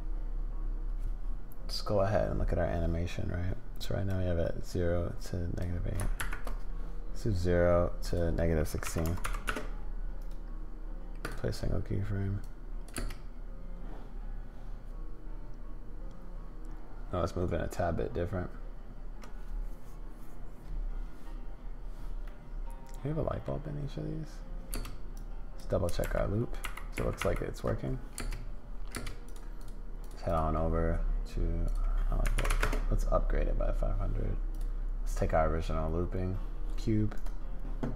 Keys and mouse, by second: 4.1-5.6 drag, 6.2 shift+Right, 8.0-11.3 drag, 12.4 click, 13.0 space, 22.2-23.5 middle drag, 24.7 space, 25.1 click, 26.0 shift+Right, 26.6 shift+Left, 26.9 shift+Right, 27.2 shift+Left, 28.2 space, 28.9 space, 29.2 click, 29.6 click, 30.0 click, 30.2 click, 31.6-33.3 drag, 32.5 0, 34.5 click, 37.2-37.9 drag.